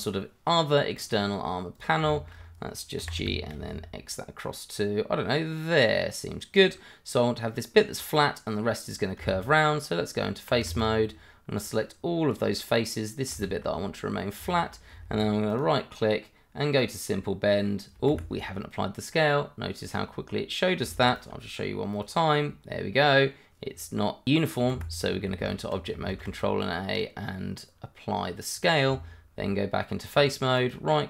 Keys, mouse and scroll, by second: 1.0 click, 2.1 shift+middle click, 2.1 middle click, 2.4-3.0 shift+scroll up 2, 3.0 g, 3.2 y, 3.5 x, 6.5 click, 10.7 shift+z, 11.5 click, 13.8 scroll up 1, 14.5 shift+middle click, 14.5 middle click, 15.5 right click, 16.8 click, 18.1 Escape, 21.1 right click, 21.9 click, 24.7 Escape, 25.2 Tab, 26.1 ctrl+a, 28.5 click, 28.8 Tab, 30.5 right click.